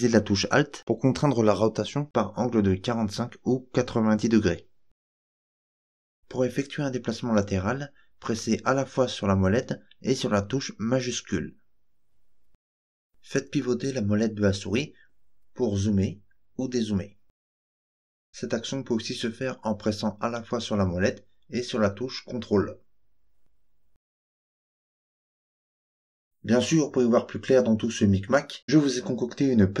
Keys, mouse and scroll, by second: 6.4-13.1 shift+middle drag, 13.2-13.7 scroll up 4, 14.5-15.3 scroll down 4, 15.6-16.1 scroll up 4, 16.3-16.8 scroll down 4, 16.8 scroll up 1, 17.4 scroll down 1, 18.2-18.5 scroll up 1, 19.3-29.8 ctrl+middle drag.